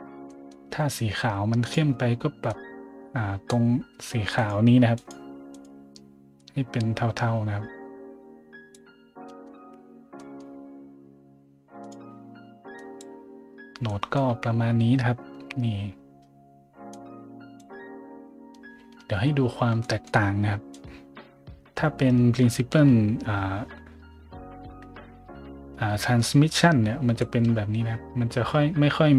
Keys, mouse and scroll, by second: 0.3 middle click, 1.6 click, 2.5-3.4 drag, 4.3 click, 4.3 right click, 5.0 click, 5.0 right click, 5.5 click, 5.5 right click, 6.4-8.7 drag, 6.4-8.7 right drag, 9.3 middle drag, 10.1 middle drag, 11.8 click, 12.7 click, 13.5 middle click, 13.9-14.3 scroll up 2, 16.9 click, 19.4 a, 19.8 middle click, 20.7-22.1 drag, 22.1 right click, 28.1 middle click, 28.9 middle click.